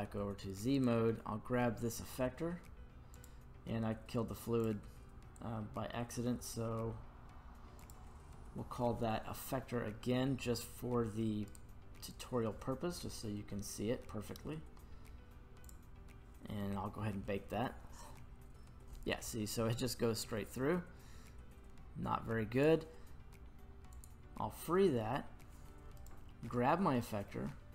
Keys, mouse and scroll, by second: 0.7-3.1 right drag, 3.1 click, 4.6-7.9 drag, 11.5 right click, 12.1 right click, 12.9-15.1 scroll down 1, 15.1-15.6 scroll down 7, 15.6-18.3 drag, 20.2-22.7 drag, 23.9 click, 26.0 right click.